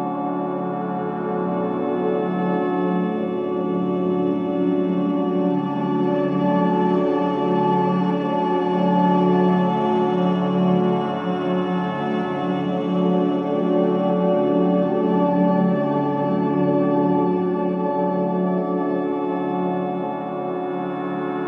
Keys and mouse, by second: 5.2-7.0 drag, 7.5-8.5 drag, 9.1 click, 11.0-11.6 typing, 12.4 Return, 12.9-18.6 drag, 18.7 click, 20.7 click.